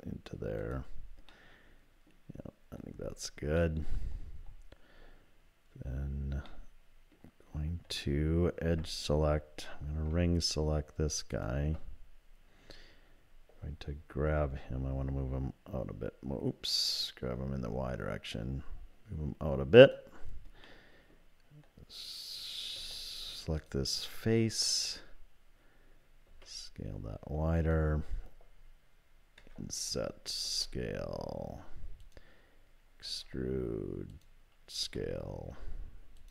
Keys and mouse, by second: 1.3 middle click, 3.6 middle click, 6.5 middle click, 8.7 2, 11.3 alt+click, 14.1 g, 20.6 click, 22.8 3, 23.6 click, 26.3 s, 29.4 i, 30.5 s, 33.0 e, 34.8 s.